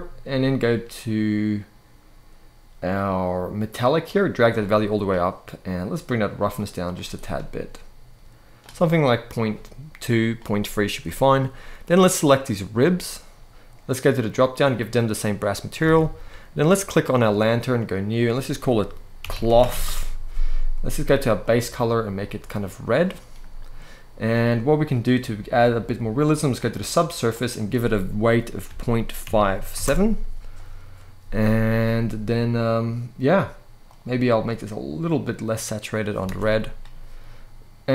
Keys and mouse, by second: 3.7 click, 6.9-8.3 drag, 11.8 click, 12.5 click, 14.1 click, 15.5 alt+a, 17.9-19.6 drag, 21.1 click, 27.1-29.6 drag, 35.9 alt+a.